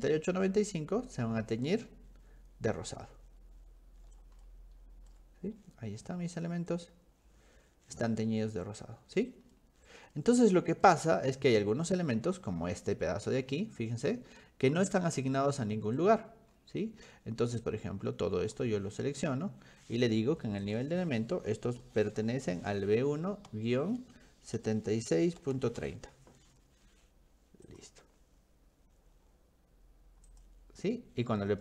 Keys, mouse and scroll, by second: 1.3-1.6 scroll down 2, 1.8 middle click, 3.1 middle click, 4.4 shift+middle click, 5.4 middle click, 5.6 scroll up 1, 5.8 scroll down 1, 5.9-7.2 scroll up 3, 7.6 middle click, 8.3 middle click, 8.6 middle click, 9.6 middle click, 10.1 middle click, 10.9-11.9 middle drag, 12.1 middle click, 12.7-13.6 scroll up 6, 15.3-16.7 scroll up 6, 17.7 click, 20.7 click, 21.9 b, 22.3 1, 23.5 -, 24.6-26.3 typing, 27.7 click, 30.3 click.